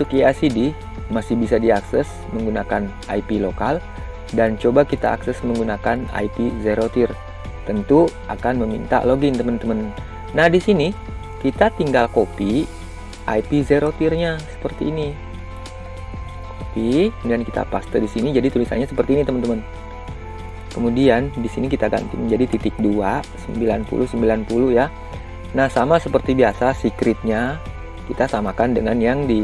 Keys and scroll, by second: 17.0 ctrl+c, 18.1 ctrl+v.